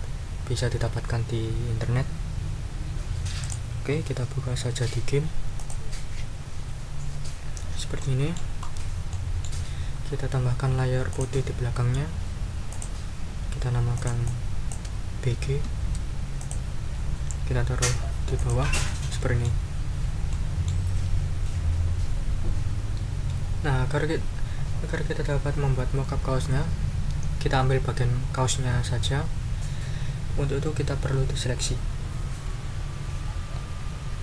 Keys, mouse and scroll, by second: 3.4 right click, 5.5 click, 8.0 middle click, 8.7 ctrl+scroll up 2, 9.1 ctrl+middle click, 10.1 ctrl+scroll down 2, 11.1 click, 12.7 click, 13.9 click, 15.3 shift+b, 15.6 shift+g, 18.5 click, 19.1-19.6 scroll up 3, 20.3-20.9 ctrl+scroll up 2.